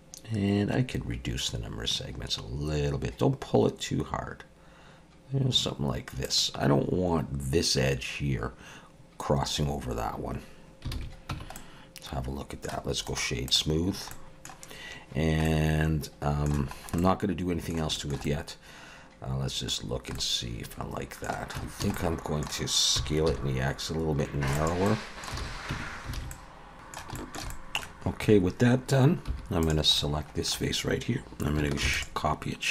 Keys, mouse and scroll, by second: 6.8-9.6 scroll up 4, 9.6-10.8 scroll down 4, 10.9 alt+a, 11.3 Tab, 11.6 middle click, 13.1 right click, 13.8 scroll down 3, 14.1 middle click, 15.4 middle click, 16.7 scroll up 2, 17.9 shift+middle click, 18.3 middle click, 19.8 scroll down 3, 20.2 middle click, 21.6 Tab, 21.8 a, 22.0 middle click, 22.9 s, 24.9 middle click, 25.4 alt+a, 25.7 Tab, 26.2 alt+a, 26.3 middle click, 26.6-27.0 scroll up 3, 26.6 x, 27.2 shift+middle click, 27.5 middle click, 29.3 3, 29.6 click, 30.0 middle click, 31.8 shift+d.